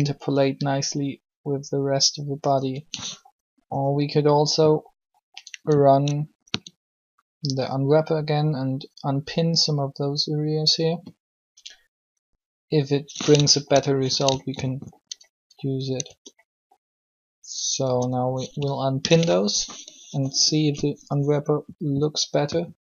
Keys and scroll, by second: 16.0 Tab, 17.8 Tab, 18.7 alt+p, 20.0 u.